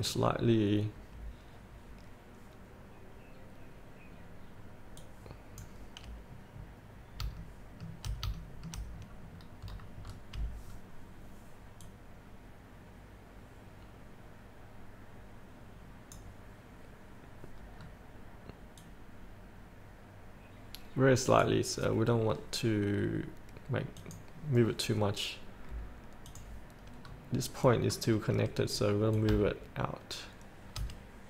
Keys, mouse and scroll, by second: 0.1 click, 7.5 shift+middle click, 8.6 shift+middle click, 9.1 scroll down 1, 12.0-16.5 drag, 18.0-18.5 scroll down 1, 19.1-22.6 drag, 27.2-27.9 scroll down 1, 29.3-31.2 drag.